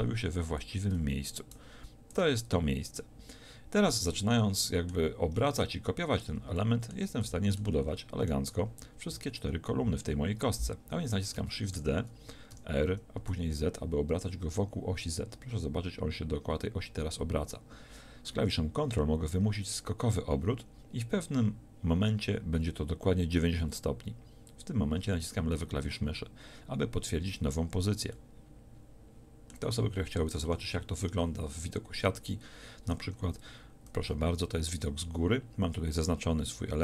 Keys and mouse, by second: 11.8 shift+d, 24.6-30.5 drag, 30.5 KP_7, 30.9 z, 33.7 click.